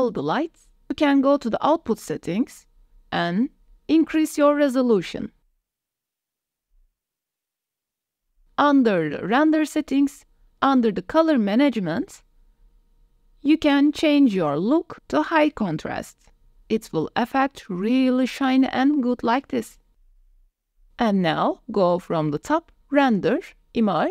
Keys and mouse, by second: 1.7 click, 4.3-6.1 drag, 7.0-8.1 drag, 9.5 click, 15.1-16.6 drag, 17.8-18.7 drag, 20.0-20.5 drag, 22.7-24.1 drag.